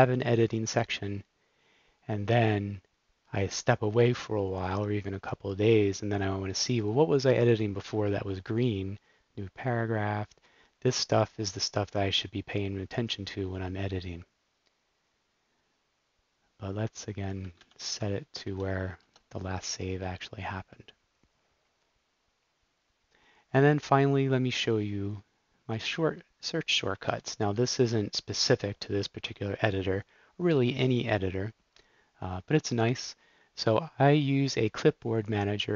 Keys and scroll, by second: 17.7 shift+super+p, 18.5 Down, 18.9 Return, 27.2 super+Up, 27.5 super+s.